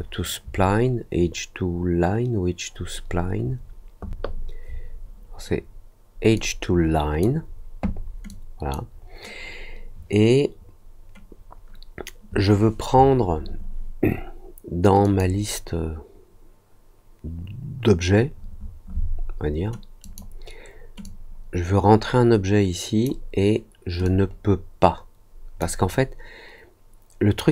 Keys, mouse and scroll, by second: 6.3 click, 8.2-8.7 drag, 15.0 click, 20.0 click, 21.0-23.0 drag, 24.0-25.5 drag.